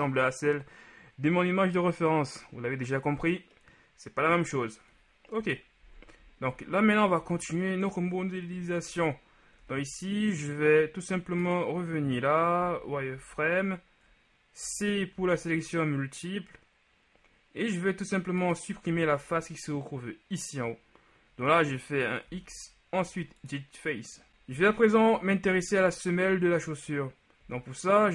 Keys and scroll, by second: 5.5 KP_1, 7.3 z, 8.5 KP_3, 12.7 z, 13.2 z, 15.2 c, 19.0 z, 22.4 x, 25.1 shift+KP_3, 27.5 z.